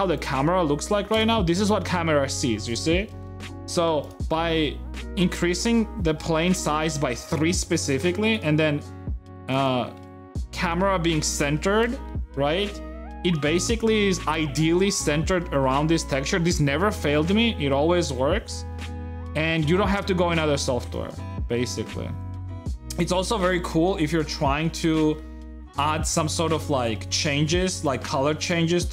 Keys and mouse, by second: 0.9 KP_0, 3.0 shift+middle click, 3.5 a, 4.1 g, 5.3 shift+middle click, 6.0 g, 10.0 g, 11.9 middle click, 12.1 click, 13.4 KP_0, 23.5-27.2 drag, 28.1 g, 28.1 shift+a.